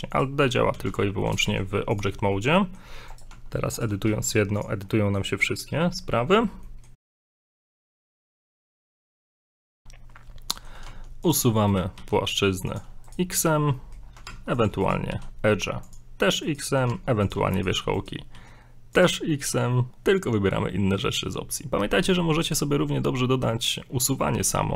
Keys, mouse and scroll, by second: 0.1 right click, 0.7 alt+d, 2.2 scroll down 2, 2.3 middle click, 3.1 right click, 3.3 Tab, 3.8 right click, 4.0 g, 4.9 middle click, 6.6 middle click, 9.5 shift+middle click, 9.9 scroll up 1, 10.5 middle click, 10.8 middle click, 10.9 ctrl+Tab, 11.7 right click, 11.9 right click, 12.3 x, 13.0 right click, 13.3 right click, 13.6 x, 13.7 middle click, 14.0 middle click, 14.1 scroll up 2, 14.3 ctrl+Tab, 14.8 right click, 15.1 right click, 15.1 x, 16.4 right click, 16.9 right click, 16.9 ctrl+Tab, 17.6 right click, 17.9 right click, 18.3 right click, 18.4 x, 19.6 scroll down 1, 19.7 middle click, 22.0 x.